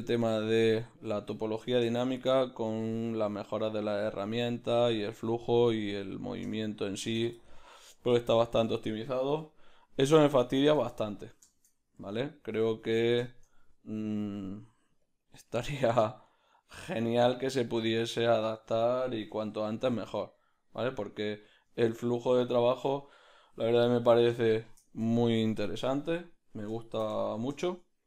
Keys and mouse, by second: 0.4 middle click, 1.9 shift+middle click, 7.4 ctrl+middle click, 8.2 shift+middle click, 8.7 Tab, 8.7-10.3 middle drag, 9.3 \, 10.3 shift+right click, 10.9-16.4 ctrl+middle drag, 12.6 q, 14.0 g, 16.4 s, 17.9-19.3 ctrl+middle drag, 19.3 r, 21.8-26.2 ctrl+middle drag, 23.5 s, 26.8 shift+middle click, 27.2 ctrl+middle click, 27.6 shift+middle click.